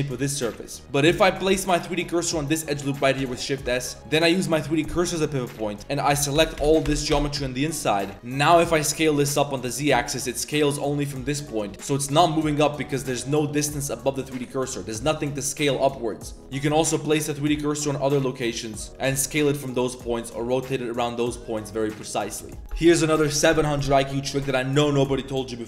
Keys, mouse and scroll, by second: 1.1 alt+click, 1.5 shift+s, 3.2 Tab, 3.6 Tab, 5.3 click, 5.6 3, 7.7 click, 8.5 s, 10.0 z, 10.1 drag, 11.7 click, 12.4 KP_1, 13.1 shift+click, 16.4 ctrl+z, 16.4 s, 16.4 1, 18.5 ctrl+z, 18.8 ctrl+z, 19.1 s, 20.3 r.